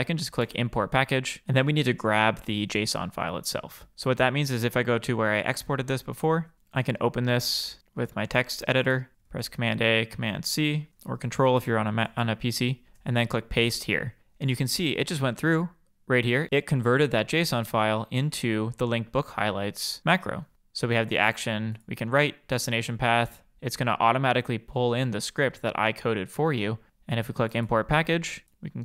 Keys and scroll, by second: 9.4 super+a, 11.0 super+c, 12.9 super+v.